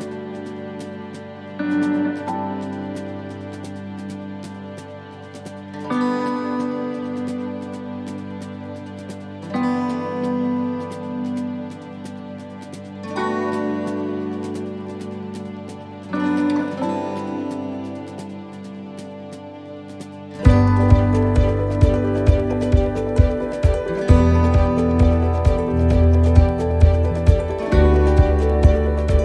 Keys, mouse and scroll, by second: 0.0 shift+middle click, 0.5 middle click, 1.2 shift+middle click, 2.1 scroll up 1, 2.5 shift+middle click, 3.6 click, 5.4 middle click, 6.2 shift+middle click, 6.8 scroll up 1, 7.2 shift+middle click, 7.6-7.9 scroll up 1, 7.9 middle click, 9.3 right click, 10.6 l, 11.7 shift+d, 15.1 right click, 16.0 l, 17.0 shift+d, 19.2 middle click, 20.6 click, 22.6 click, 24.1 shift+middle click, 24.8 middle click, 25.4 shift+middle click, 26.1-26.6 scroll up 2.